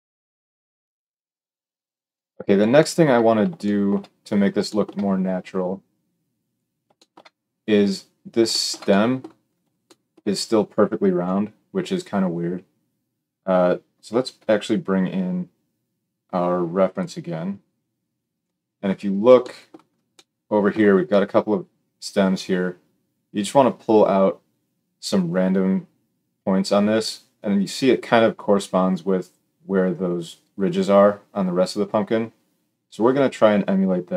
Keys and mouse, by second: 0.0-34.1 drag, 11.2 KP_7.